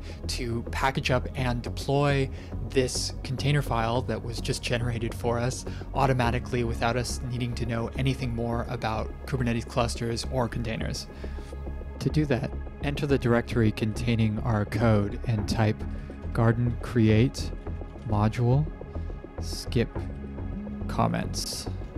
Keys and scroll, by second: 14.5 BackSpace, 15.5-21.9 typing.